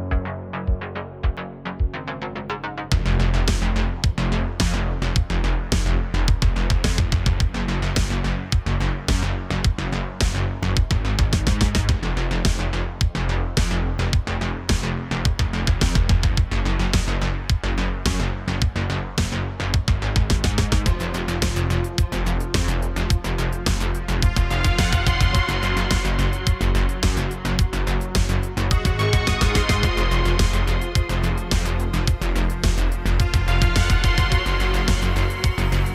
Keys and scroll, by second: 0.5 v, 1.9 l, 2.4 g, 2.8 y, 3.9 2, 12.1 alt+s, 13.2 Tab, 22.2 shift+a, 24.6 r, 35.6 shift+a.